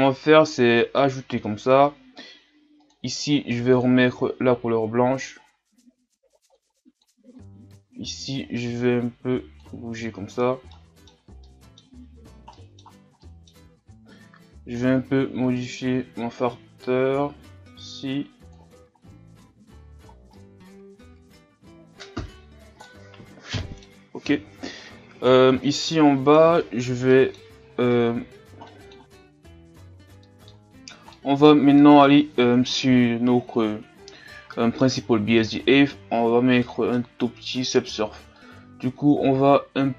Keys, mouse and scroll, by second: 0.1-6.4 drag, 7.3-19.1 drag, 19.1-20.3 scroll down 4, 19.7 a, 20.3-22.2 middle drag, 22.2-22.8 scroll up 2, 22.8-29.0 middle drag, 38.9-39.9 drag.